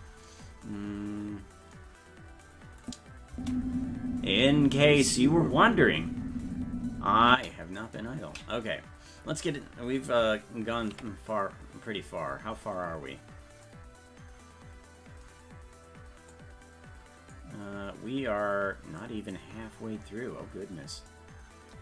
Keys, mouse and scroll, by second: 1.0-1.3 scroll down 1, 1.7-2.9 scroll down 6, 2.9 click, 3.3 space, 11.2 ctrl+s, 11.8-12.4 scroll down 11, 13.0-14.7 scroll down 21, 16.4 click, 18.1-19.7 scroll down 8, 19.7-20.4 scroll up 10, 21.1 scroll up 10.